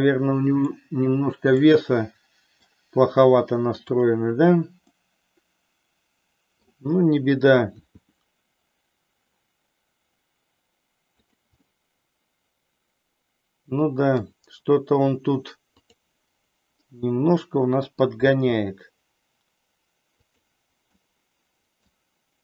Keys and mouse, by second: 1.6-2.7 middle drag, 3.6 click, 5.0-6.6 middle drag, 7.7 r, 11.7-14.2 middle drag, 15.7 click, 16.7-18.1 middle drag, 18.4 r, 20.4 click, 21.0 middle click.